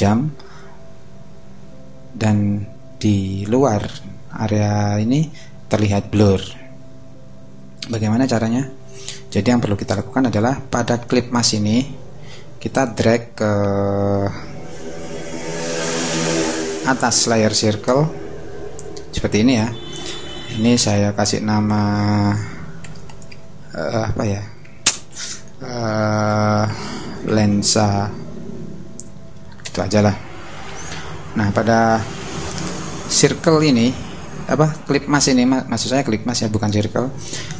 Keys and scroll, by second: 22.8 l, 23.1 o, 24.2 BackSpace, 26.3-28.1 typing, 29.6 Return.